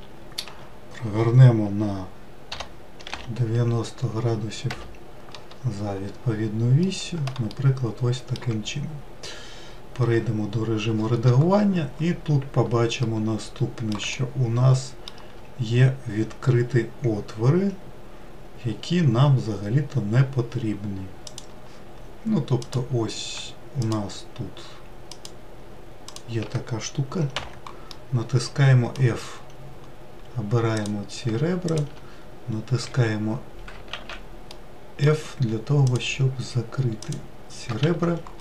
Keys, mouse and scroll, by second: 0.5 r, 5.9-6.8 scroll up 2, 6.8-8.9 middle drag, 8.9-9.8 scroll up 1, 10.1 Tab, 12.0 scroll up 1, 13.0-17.3 middle drag, 21.3-22.7 drag, 23.8 shift+click, 25.1 shift+click, 26.1 shift+click, 27.3 f, 27.9-29.3 middle drag, 29.3-30.8 scroll up 2, 30.8 click, 31.7 shift+click, 32.9 f, 33.9 ctrl+z, 34.5-35.9 middle drag, 35.9 shift+click, 37.0 shift+click, 37.9 f.